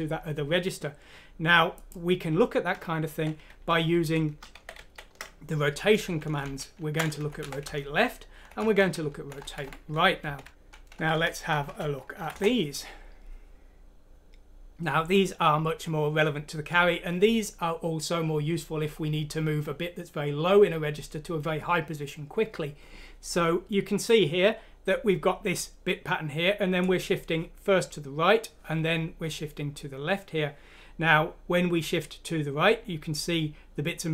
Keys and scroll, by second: 6.4 typing, 7.1 ctrl+Home, 7.4 Delete, 8.1 Up, 8.1 typing, 9.3 Right, 9.6 Right, 10.2 Delete, 10.4 F6, 12.2-13.3 typing.